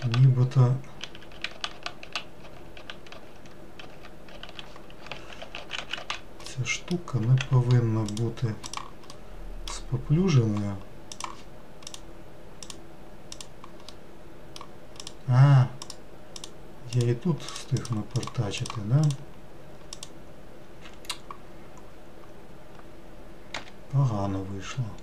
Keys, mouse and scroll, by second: 0.0 ctrl+z, 1.0 ctrl+z, 1.3 ctrl+z, 1.5 ctrl+z, 2.4 ctrl+z, 2.8 ctrl+z, 3.1 ctrl+z, 3.8 ctrl+z, 5.2 ctrl+z, 6.5 middle click, 7.4 x, 8.7 click, 9.1-11.1 middle drag, 11.1 click, 12.6 click, 13.3 click, 13.9-15.0 middle drag, 15.0-16.4 drag, 16.9 click, 17.5 click, 17.8 click, 18.2 click, 18.6 click, 19.0 click, 19.9 click.